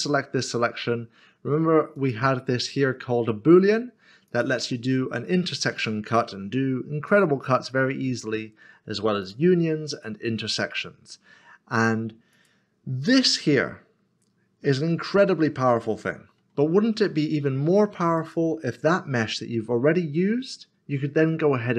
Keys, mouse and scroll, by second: 2.0 click, 4.3 click, 5.1 click, 5.3 middle click, 9.0 click, 9.2 click, 14.6 middle click, 18.1 middle click, 18.2 click.